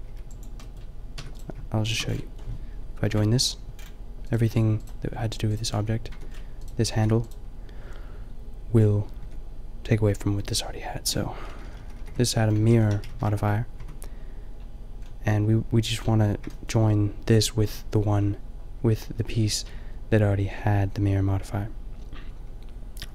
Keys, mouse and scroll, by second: 0.0 b, 1.2 Tab, 1.6-3.8 drag, 3.0 ctrl+j, 5.1 g, 6.1 Tab, 6.9 g, 9.2 Tab, 10.4 Tab, 11.5 ctrl+z, 12.7 ctrl+z, 13.5 ctrl+shift+z, 13.8 Tab, 17.2-19.6 drag.